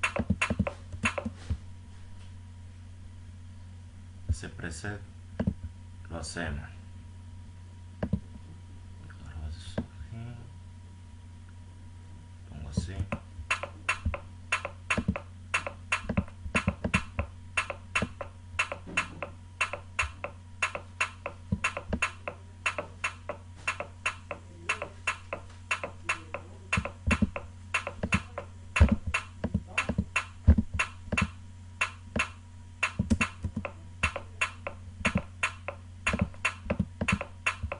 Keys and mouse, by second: 1.8 right click, 2.6-4.0 drag, 4.4-4.8 drag, 8.3 click, 14.0 click, 16.3 click, 34.0 click, 36.3 click.